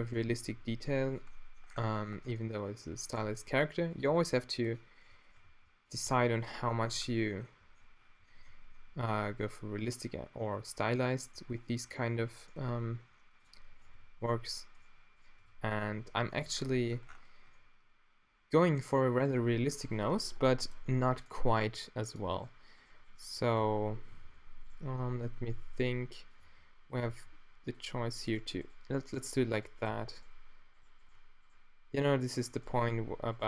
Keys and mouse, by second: 0.4 g, 1.4-2.0 middle drag, 2.2 Tab, 3.2 Tab, 4.1 g, 5.4 g, 6.0 g, 6.9 Tab, 6.9-8.8 middle drag, 9.5 Tab, 10.4-11.4 middle drag, 12.8 e, 14.3 right click, 15.5 f, 15.9 q, 16.5 Tab, 19.7 Tab, 21.5 e, 23.6 e, 23.6 f, 24.2 z, 25.4 g, 26.4 e, 29.9 e, 29.9 f.